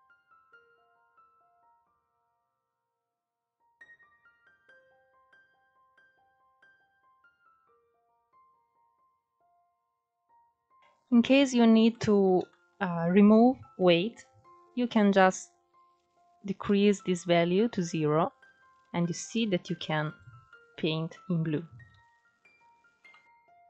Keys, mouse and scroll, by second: 0.0 scroll up 4, 0.1 middle click, 0.4 click, 0.8 middle click, 1.0 click, 1.6 ctrl+z, 1.9 click, 2.8 scroll down 4, 3.0 middle click, 3.5-4.0 scroll up 4, 3.7 click, 4.0 middle click, 4.2-6.0 drag, 6.0-7.5 middle drag, 7.5 scroll up 1, 7.8 middle click, 8.6-9.6 scroll up 3, 8.9 shift+middle click, 9.6-11.4 middle drag, 11.4 scroll down 1, 11.5-13.1 middle drag, 13.1-18.2 drag, 18.2-19.7 middle drag, 19.7 ctrl+z, 20.5 scroll down 2, 20.8-23.2 middle drag, 23.2-23.6 drag.